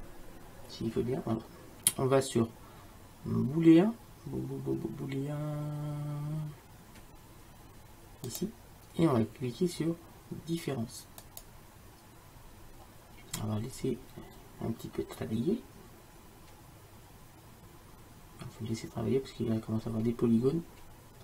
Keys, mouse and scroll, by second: 8.4-10.2 drag, 11.3-21.2 drag.